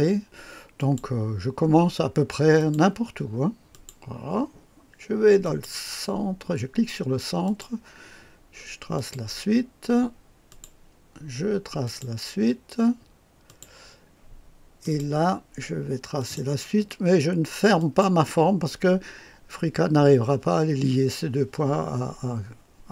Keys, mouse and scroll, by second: 0.7 click, 2.5 click, 3.7 click, 5.4 click, 7.4 click, 8.9 click, 10.4 click, 11.8 click, 13.4 click, 14.8 click, 16.1 click, 17.7 click.